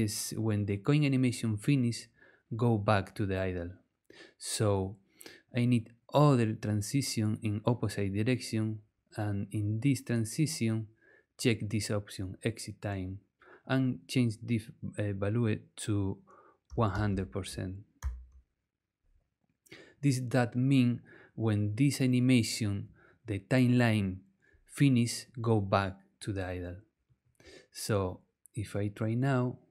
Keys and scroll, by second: 16.4-18.0 typing.